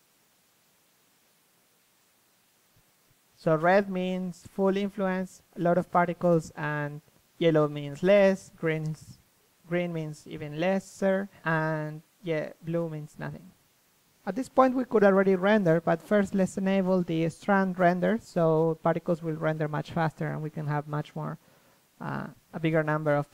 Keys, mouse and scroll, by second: 0.5-1.6 drag, 0.9 KP_3, 1.6-3.0 middle drag, 3.0 click, 3.8 middle click, 4.1 click, 4.3 middle click, 4.7 click, 6.7 ctrl+c, 7.0 ctrl+v, 16.0-18.9 drag, 20.3-21.7 drag, 21.7 middle click.